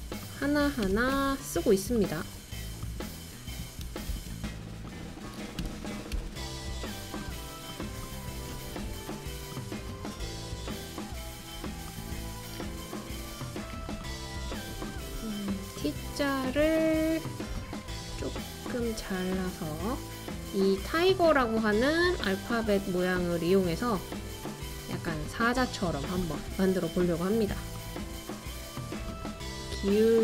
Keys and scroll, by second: 0.8 BackSpace, 1.2 e, 3.8 super+c, 4.1 super+v, 5.6 BackSpace, 5.9 BackSpace, 5.9 r, 6.1 r, 8.4 typing.